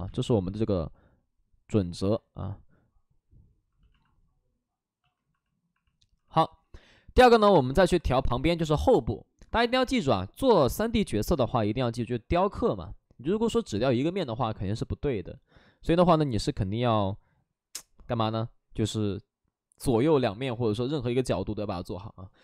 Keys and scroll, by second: 0.0 space, 0.2 ctrl+z.